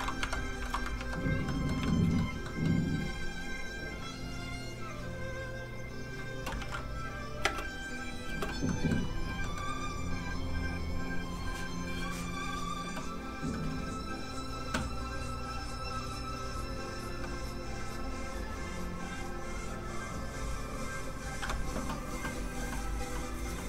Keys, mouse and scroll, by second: 0.6 shift+middle click, 0.9 ctrl+Tab, 1.4 Tab, 1.5 middle click, 1.8 shift+middle click, 2.4 middle click, 2.5 middle click, 4.7 click, 6.6 ctrl+s, 7.1 click, 7.4 space, 8.6 shift+middle click, 9.4 middle click, 9.5 middle click, 15.3 click.